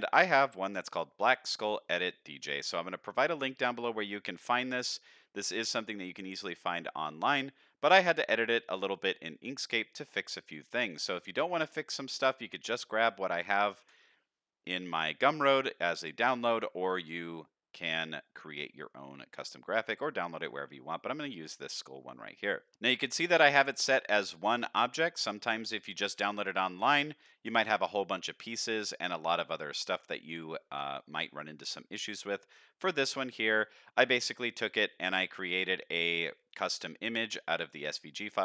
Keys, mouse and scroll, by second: 11.6-12.0 middle drag, 12.6 click, 13.8 KP_7, 14.6-15.6 scroll up 7, 15.8-16.2 shift+middle drag, 16.5-16.8 scroll down 2, 17.1-18.4 scroll up 1, 18.4-18.8 scroll up 1, 19.1-19.6 scroll down 2, 22.7 scroll up 4, 23.0 shift+middle drag, 24.4 click, 25.1 click, 25.8 shift+middle drag, 26.9-28.1 scroll down 2, 29.2-29.5 shift+middle drag, 29.7 scroll down 1, 33.5 shift+middle click.